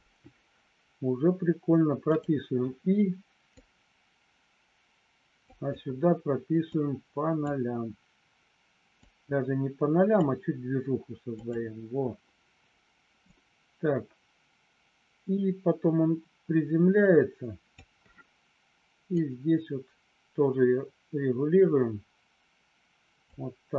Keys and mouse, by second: 3.6-5.6 drag, 6.8 click, 9.0-10.2 drag, 11.3 click, 13.3-17.8 drag, 19.2-23.2 drag.